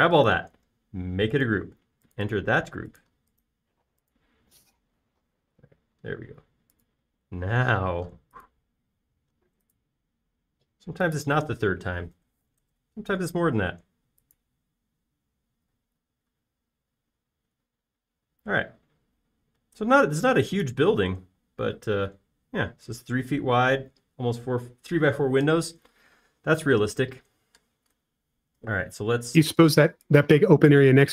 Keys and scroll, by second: 13.1-14.1 typing, 17.0 space, 20.7 |, 25.4 space, 30.0 b.